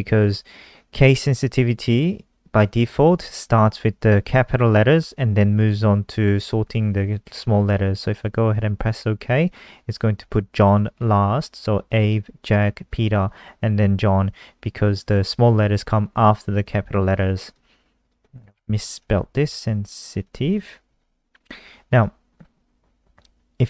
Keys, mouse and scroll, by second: 8.8 click, 17.9 click, 18.7 End, 19.0-21.0 typing, 21.8 click, 22.1-22.5 scroll down 1, 22.6-23.6 scroll down 1.